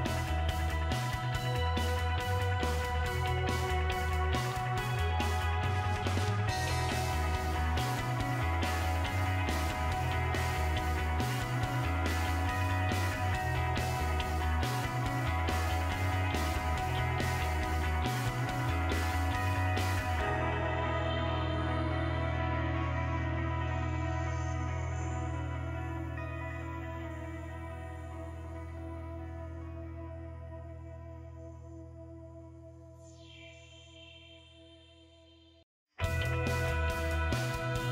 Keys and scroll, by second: 0.0 BackSpace, 0.4 9, 2.9 5.